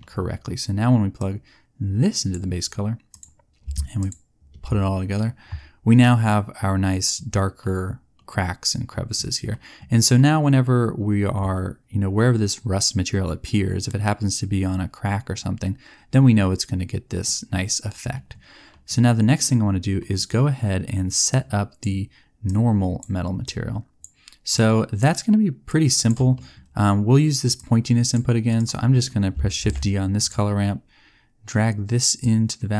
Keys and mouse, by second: 21.2 click, 22.5 click, 25.7 click, 26.3 click, 29.5 shift+d.